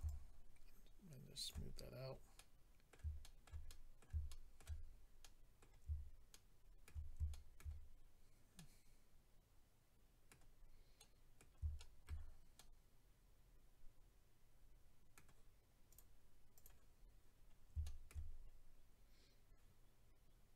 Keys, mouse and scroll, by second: 0.0 shift+click, 1.7-2.0 scroll down 3, 2.3 scroll down 4, 2.3 middle click, 3.2 shift+middle click, 3.6 middle click, 4.2 shift+middle click, 4.8-5.6 scroll down 3, 5.2 middle click, 6.1 shift+scroll up 1, 6.3 shift+middle click, 6.8 middle click, 7.3 shift+middle click, 7.8-8.6 scroll up 2, 8.6 middle click, 10.5-11.0 scroll down 2, 11.0 middle click, 11.8 shift+middle click, 12.6 middle click, 15.9 click, 16.5 click, 16.6 click, 16.9-17.8 scroll up 4, 17.8 shift+middle click, 18.3 scroll up 2.